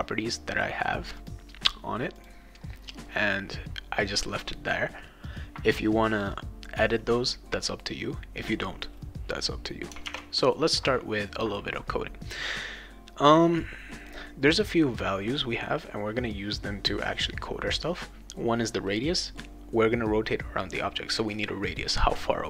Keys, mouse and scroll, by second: 1.1 click, 2.1 click, 10.1 alt+Tab.